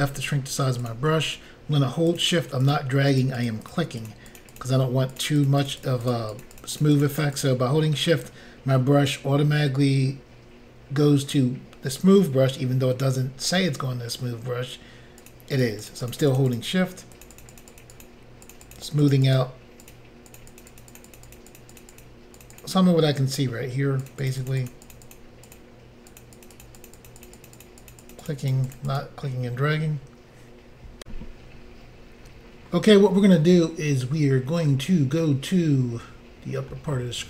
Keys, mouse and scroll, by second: 0.8 click, 0.9 click, 2.1 shift+click, 2.2 shift+click, 2.6 shift+click, 2.7 shift+click, 3.1 shift+click, 3.2 shift+double click, 3.4 shift+click, 3.5 shift+click, 3.7 shift+click, 3.7 shift+double click, 4.0 shift+click, 4.1 shift+click, 4.3 shift+click, 4.4 shift+double click, 4.5 shift+click, 4.6 shift+click, 5.1 shift+click, 5.2 shift+click, 5.4 shift+click, 5.5 shift+click, 5.6 shift+click, 5.7 shift+double click, 5.8 shift+click, 5.9 shift+click, 6.1 shift+click, 6.1 shift+double click, 6.3 shift+click, 6.4 shift+click, 6.6 shift+click, 6.6 shift+double click, 6.8 shift+click, 6.8 shift+click, 7.0 shift+click, 7.1 shift+double click, 7.2 shift+click, 7.2 shift+click, 7.4 shift+click, 7.4 shift+double click, 15.2 shift+click, 15.3 shift+click, 15.6 shift+click, 15.6 shift+double click, 15.9 shift+click, 16.1 shift+double click, 16.3 shift+click, 16.4 shift+click, 16.5 shift+click, 17.3 shift+click, 17.3 shift+click, 17.4 shift+double click, 17.5 shift+click, 17.6 shift+click, 17.7 shift+click, 17.8 shift+double click, 18.0 shift+click, 18.0 shift+click, 18.5 shift+click, 18.5 shift+click, 18.7 shift+click, 18.8 shift+click, 19.0 shift+click, 19.1 shift+double click, 19.3 shift+click, 19.4 shift+click, 19.8 shift+click, 19.9 shift+click, 20.3 shift+click, 20.4 shift+click, 20.5 shift+click, 20.6 shift+double click, 20.7 shift+click, 20.8 shift+click, 20.9 shift+click, 21.0 shift+double click, 21.1 shift+click, 21.2 shift+click, 21.3 shift+click, 21.4 shift+double click, 21.5 shift+click, 21.6 shift+click, 21.7 shift+click, 21.8 shift+double click, 21.9 shift+click, 22.0 shift+click, 22.4 shift+click, 22.5 shift+double click, 22.6 shift+click, 22.6 shift+click, 24.1 shift+click, 24.3 shift+click, 24.4 shift+click, 24.5 shift+click, 24.6 shift+double click, 24.7 shift+click, 24.8 shift+click, 24.9 shift+click, 25.0 shift+double click, 25.1 shift+click, 25.2 shift+click, 25.5 shift+click, 25.6 shift+double click, 26.2 shift+click, 26.2 shift+click, 26.4 shift+click, 26.5 shift+double click, 26.6 shift+click, 26.7 shift+click, 26.8 shift+click, 26.9 shift+double click, 27.0 shift+click, 27.1 shift+click, 27.2 shift+click, 27.3 shift+double click, 27.4 shift+click, 27.5 shift+click, 27.6 shift+click, 27.7 shift+double click, 27.9 shift+click, 28.0 shift+click, 28.1 shift+click, 28.2 shift+double click, 28.3 shift+click, 28.3 shift+click, 28.5 shift+click, 28.6 shift+double click, 28.7 shift+click, 28.8 shift+click, 28.9 shift+click, 29.0 shift+double click, 31.0 Insert, 36.7 middle click.